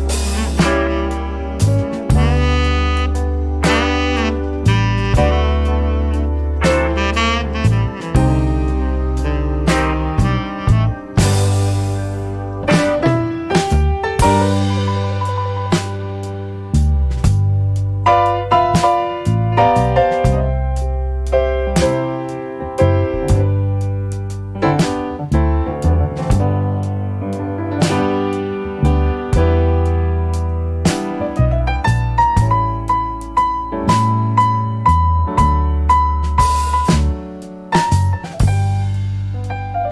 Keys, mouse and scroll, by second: 0.3 click, 2.0 click, 3.1 click, 4.1 click, 4.8 right click, 5.2 middle click, 5.9 click, 7.7 click, 9.0 click, 10.1 BackSpace, 11.2-12.3 typing, 13.7 click, 15.8 click, 17.0 click, 18.4 click, 20.0 c, 20.7 o, 21.1 s, 22.3-28.1 typing, 29.8 click, 30.4 click, 32.5-34.3 drag, 34.9 click, 35.9 click, 38.7 click.